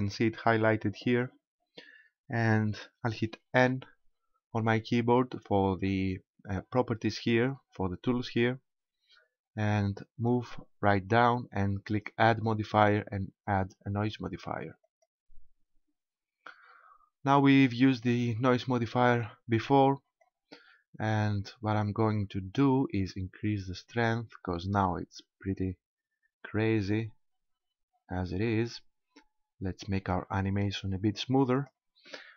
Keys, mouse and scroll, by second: 3.6 n, 7.5 click, 12.3 click, 16.5-18.1 scroll down 1, 20.2 click, 23.0 click, 31.5 click.